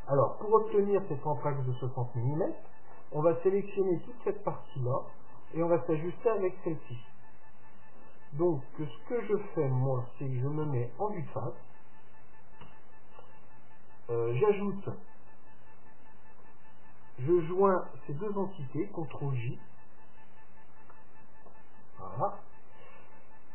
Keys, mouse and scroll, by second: 0.8-2.7 middle drag, 9.2-11.2 middle drag, 10.8 KP_3, 12.8 Tab, 16.5-18.5 right drag, 19.1 ctrl+j, 21.0-23.5 middle drag, 22.8-23.5 scroll up 1.